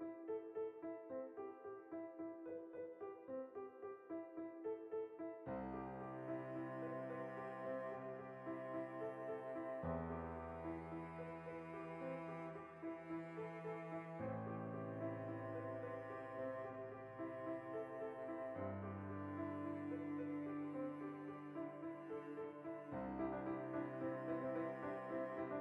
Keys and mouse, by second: 0.1 click, 0.4 alt+q, 1.1 shift+middle click, 1.6 g, 2.0 click, 2.1 middle click, 2.3 Tab, 3.0 right click, 3.2-4.6 middle drag, 3.4 Tab, 4.4 3, 4.6 right click, 4.8-5.8 ctrl+middle drag, 5.8 right click, 6.1-7.1 ctrl+right drag, 7.3-8.8 shift+middle drag, 8.6 shift+d, 8.8 right click, 9.7 r, 11.1 right click, 11.2 x, 11.6-13.3 shift+middle drag, 13.3-14.5 right drag, 14.9 shift+a, 15.6 alt+o, 16.3 click, 16.6 shift+middle click, 16.9 r, 17.9 o, 18.2 s, 18.7 click, 19.2 alt+o, 19.8 shift+middle click, 20.2 g, 20.7 click, 22.3 x, 22.9 ctrl+middle click, 23.1 right click, 23.3-25.1 ctrl+middle drag, 25.1 right click, 25.2-25.6 middle drag.